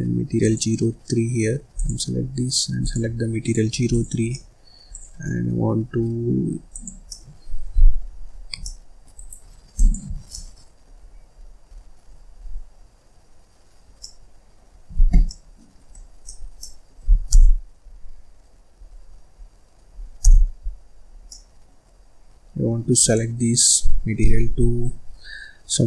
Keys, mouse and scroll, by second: 0.0 click, 1.7 click, 3.6 click, 4.2 scroll down 1, 4.2 middle click, 4.8 click, 5.2 middle click, 5.8-6.6 scroll up 5, 6.6 click, 7.0-8.2 middle drag, 8.2 Escape, 8.5 middle click, 9.1 right click, 9.6 click, 10.0 Escape, 10.2 middle click, 11.0-12.7 scroll up 17, 13.9 scroll up 1, 14.0 middle click, 14.7 Escape, 14.9 Escape, 15.2 middle click, 15.9-16.2 scroll up 2, 16.2 middle click, 16.5 middle click, 17.3 KP_0, 18.1-18.8 scroll down 11, 18.8-19.4 scroll up 13, 19.6-20.2 scroll down 1, 20.2 KP_0, 20.8-21.2 scroll up 4, 21.2 middle click, 21.9-22.9 scroll up 4, 22.9 click.